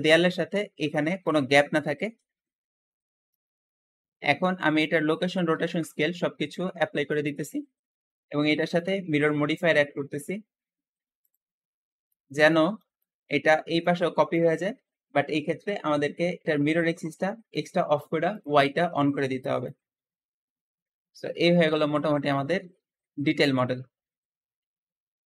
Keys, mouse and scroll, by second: 2.3 Escape, 3.2 click, 5.4 ctrl+a, 7.3-8.5 scroll down 2, 8.5-11.5 ctrl+drag, 11.7-12.0 scroll down 1, 12.0-15.9 shift+middle drag, 15.6 Escape, 17.4 click, 18.2 click, 19.2-19.5 scroll down 1, 19.5-21.9 middle drag, 21.9 scroll down 2, 22.1-25.2 middle drag.